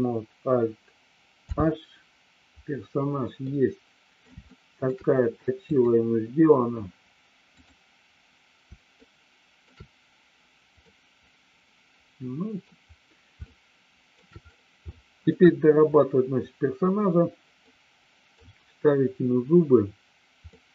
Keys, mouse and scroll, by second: 1.6 alt+h, 3.4 middle click, 4.4 shift+middle click, 5.6 click, 7.5 click, 9.0 shift+middle click, 10.9-12.6 middle drag, 13.5 shift+middle click, 14.8 shift+middle click, 17.6 middle click, 20.5-20.7 middle drag.